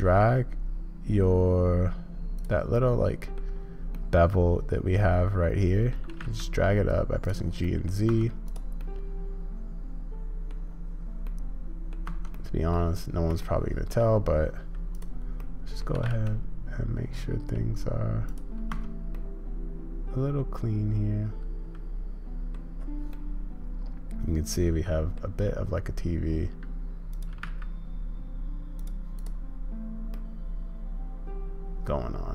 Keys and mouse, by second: 2.8 click, 4.0-6.0 middle drag, 7.7 click, 8.1 Tab, 8.9-10.5 middle drag, 11.2-11.9 drag, 12.1 Tab, 12.3 click, 13.4 shift+click, 15.4 click, 18.7 Tab, 19.2-22.5 drag, 23.1-25.2 drag, 27.1 click, 29.1 click, 30.1-32.3 middle drag.